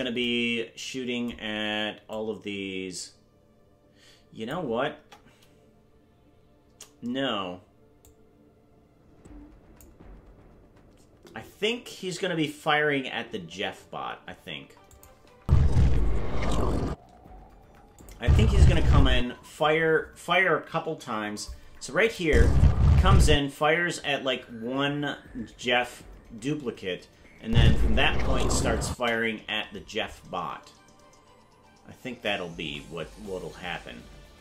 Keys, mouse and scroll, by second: 2.0-4.5 drag, 4.9 KP_0, 8.0-9.8 drag, 14.9 click, 15.4 space, 18.0 click, 18.2 space, 19.2 space, 22.0 click, 22.2 space, 23.3 space, 28.9 space.